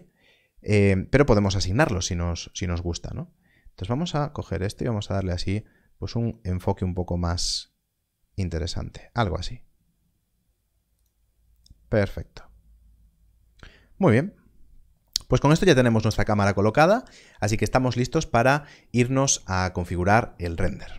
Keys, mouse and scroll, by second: 3.5 click, 10.9 click.